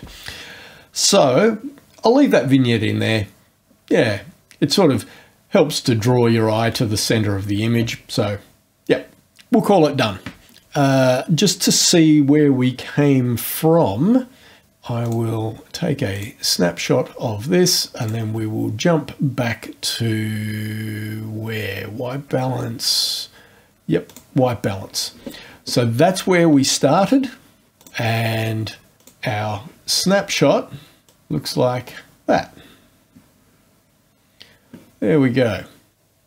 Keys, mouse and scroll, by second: 15.0 click, 16.1 click, 18.0 click, 24.0 click, 27.7 click, 29.0 click, 31.1-34.6 drag.